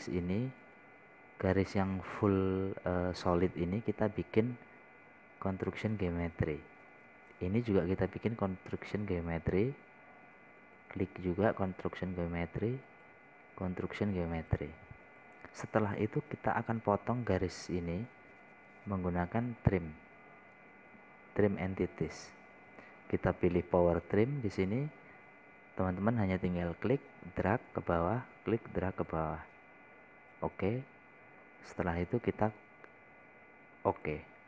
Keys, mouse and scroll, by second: 26.5 scroll down 1, 28.0-31.1 drag, 32.8-33.8 scroll up 1.